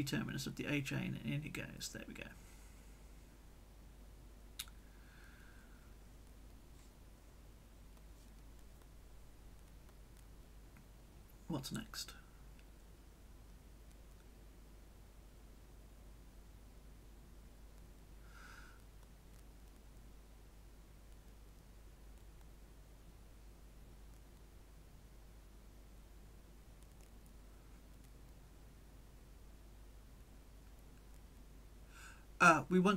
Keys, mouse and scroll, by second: 1.1 click, 2.3 click, 2.7-5.2 drag, 3.5-5.2 right drag, 6.6 scroll down 1, 7.2 scroll down 1, 7.8 scroll down 1, 8.5-11.1 scroll down 1, 11.3 scroll down 2, 11.7-12.7 scroll up 2, 12.7-18.7 scroll down 1, 18.7-21.5 drag, 21.5-23.8 middle drag, 23.8 click, 24.1-30.2 middle drag, 30.2 click, 31.5 click.